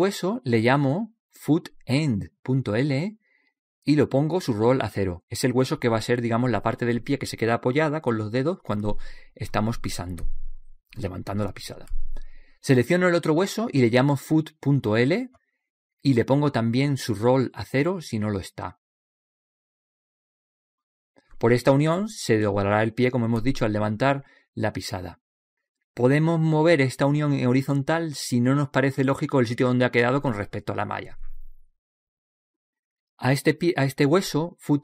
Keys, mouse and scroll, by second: 0.3 ctrl+v, 1.5 click, 3.2 o, 7.4 click, 11.1 right click, 13.9 right click, 14.7 click, 16.1 o, 18.8 click, 22.0 right click, 28.5 click, 32.3-33.6 right drag, 33.6 middle click, 34.2 click, 34.6 middle click.